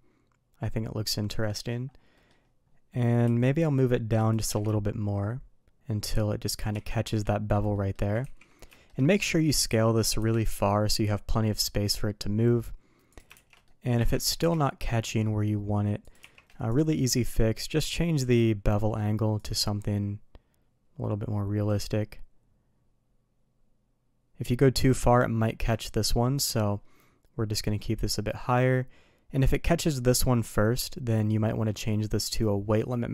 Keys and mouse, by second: 2.1 middle drag, 3.2 q, 4.3 g, 6.7 shift+2, 7.7 middle drag, 8.2 ctrl+z, 8.6 shift+middle click, 9.6 s, 13.3 shift+2, 13.6 middle click, 13.9 ctrl+z, 14.2 g, 16.1 shift+2, 16.6 click, 19.3-24.8 drag, 25.0-25.5 shift+middle drag, 27.4-29.3 drag, 31.1 click, 32.2 click.